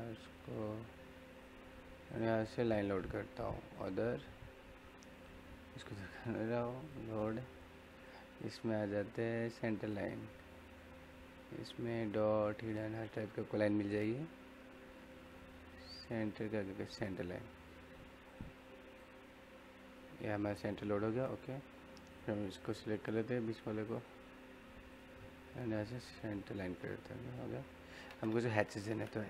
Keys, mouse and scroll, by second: 0.0-0.6 typing, 6.7 typing, 9.5-13.1 scroll down 1, 17.1 click, 22.9-23.3 scroll up 1, 23.3 middle click, 23.7 click, 26.8 scroll down 1, 26.9 middle click, 27.9 middle click, 28.8 h.